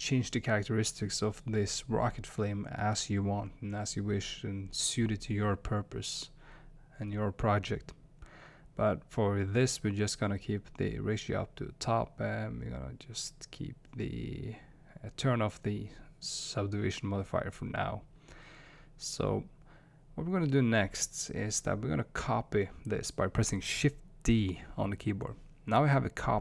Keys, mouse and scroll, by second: 2.3-4.4 middle drag, 4.4 middle drag, 6.6-8.8 middle drag, 9.0-14.6 drag, 14.4 middle click, 15.2 click, 15.2 middle click, 16.0 drag, 16.0 middle drag, 17.0 click, 17.0 middle click, 18.0-18.4 middle drag, 21.6-25.4 middle drag.